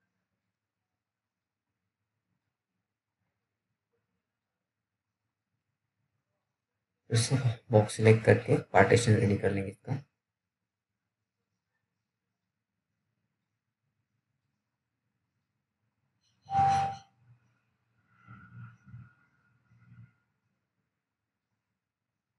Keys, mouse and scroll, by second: 0.5 click, 1.1 scroll up 1, 3.2 t, 5.8 click, 7.1-9.0 scroll up 1, 9.0 scroll down 1, 9.1 middle click, 9.5-10.3 scroll up 1, 10.3 click, 10.9-11.5 scroll down 1, 11.5-11.9 scroll up 1, 13.9 click, 14.2-14.7 scroll down 1, 14.8 alt+middle click, 15.2 scroll down 1, 15.5 middle click, 16.8 t, 17.3-18.4 scroll down 1, 18.5 alt+middle click, 19.1-20.9 alt+scroll up 2, 20.9 click.